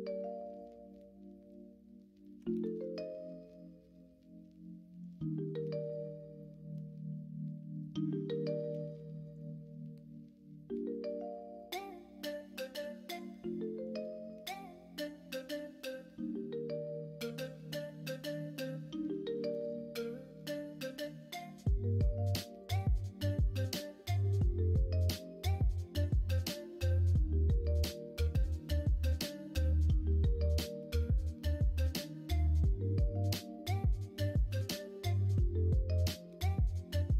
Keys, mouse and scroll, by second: 2.3 g, 6.5-8.1 middle drag, 27.6 middle click, 28.7-32.0 middle drag, 32.0-32.8 scroll down 1, 32.8-33.4 scroll down 1, 33.4 middle click, 34.3-36.0 middle drag.